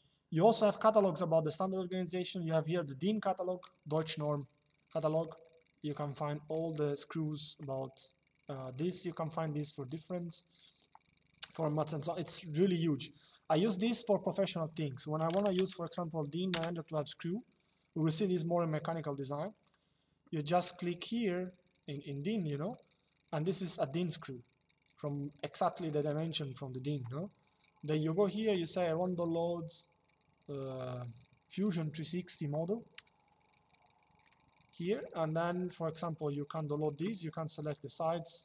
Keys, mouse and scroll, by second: 2.5 click, 13.3 click, 14.9 d, 15.3 space, 15.4 9, 16.2 Return, 19.4 click, 22.4 click, 27.9 click, 33.9 click.